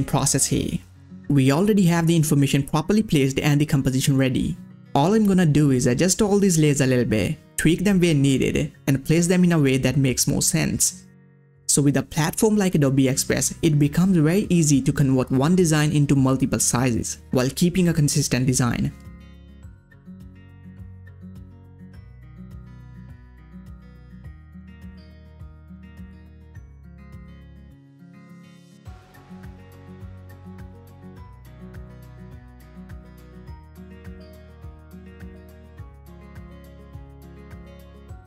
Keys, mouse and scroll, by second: 0.3-7.8 drag, 7.8-9.6 drag, 9.6-13.2 drag, 13.2 click, 13.9 ctrl+scroll up 1, 14.2 click, 14.6 scroll down 1, 15.1-17.7 drag, 17.7-20.9 drag, 20.9 scroll down 1, 22.0 click, 23.1-27.8 drag, 27.8 ctrl+scroll down 1, 28.0 space, 28.1 click, 28.3 space, 28.8-32.1 drag, 32.1-33.5 drag, 34.3 click, 34.3 scroll down 1, 34.5-38.2 drag.